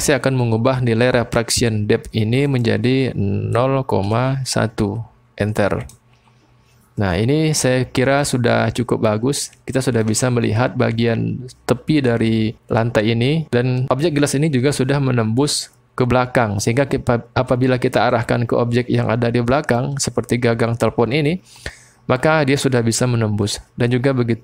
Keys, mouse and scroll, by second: 2.5-6.1 drag, 7.2-8.3 drag, 8.8 click, 14.2-16.7 drag, 18.1-19.8 drag, 22.5-24.4 drag, 22.5 middle click.